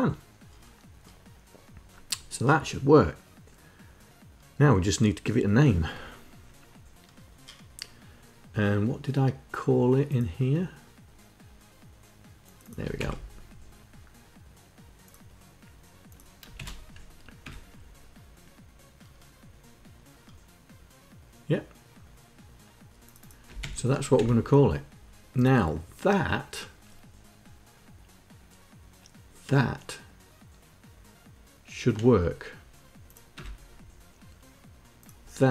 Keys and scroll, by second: 12.4 ctrl+Insert, 16.0 shift+Insert, 23.1 ctrl+Insert, 23.5 Down, 32.8 Return.